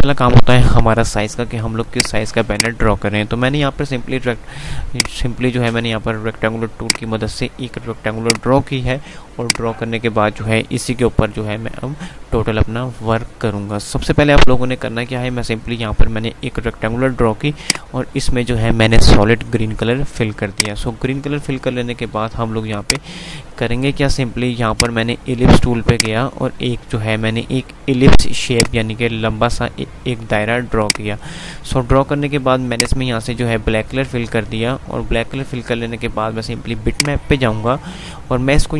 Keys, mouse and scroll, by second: 2.1 click, 4.6 F5, 5.0 click, 8.7 Delete, 9.2 click, 17.7 click, 20.6 click, 21.1 F3, 22.2 F2, 23.0 click, 23.5 F2, 24.7-28.1 drag, 28.1 F2, 30.7 click, 37.0 click.